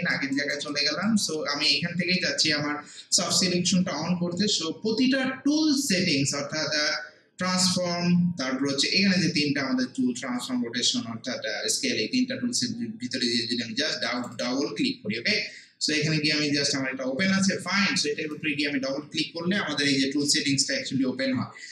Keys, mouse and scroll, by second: 0.4 alt+right click, 0.7 alt+middle click, 1.1 alt+right click, 1.4 alt+middle click, 14.2 click, 18.3-21.7 drag.